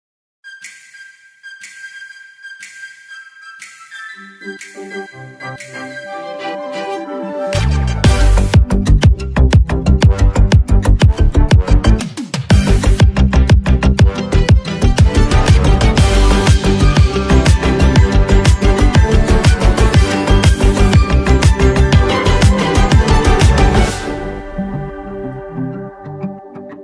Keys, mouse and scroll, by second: 4.8 Down, 12.8 click, 21.4 click, 24.4 Down, 26.6 Down.